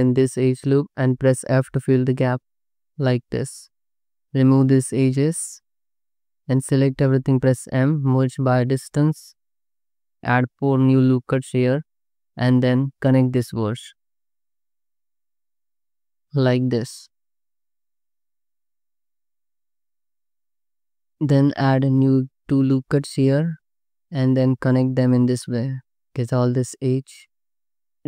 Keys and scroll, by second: 2.0 f, 4.2 2, 5.4 ctrl+x, 5.9 1, 6.4 a, 7.4 m, 10.2 ctrl+x, 10.7 ctrl+r, 11.2 ctrl+r, 12.3-14.3 typing, 15.6 j, 16.0 j, 16.6 ctrl+z, 16.9 ctrl+z, 17.4 j, 19.9 2, 20.7 ctrl+x, 21.2 ctrl+r, 22.4 1, 23.5 j, 25.0 j, 25.9 2, 26.2 ctrl+x, 27.2 2, 27.7 Tab.